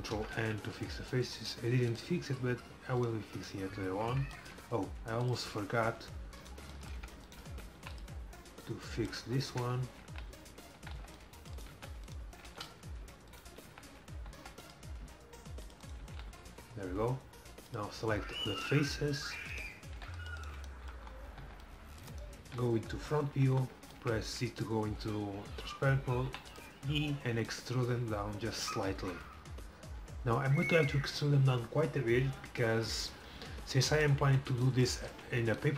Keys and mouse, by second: 0.2 ctrl+n, 0.4 a, 2.0-3.9 drag, 3.1-5.1 right drag, 5.3 middle click, 6.3 click, 6.8 middle click, 7.8 e, 8.8-10.8 drag, 8.8 right click, 9.6 right click, 10.1 f, 11.0 c, 11.8 f, 13.7 f, 14.5 c, 16.1 f, 16.4 a, 20.0 c, 21.5 c, 22.9 KP_1, 23.4 z, 26.4 e, 27.5-29.4 drag, 35.1 z.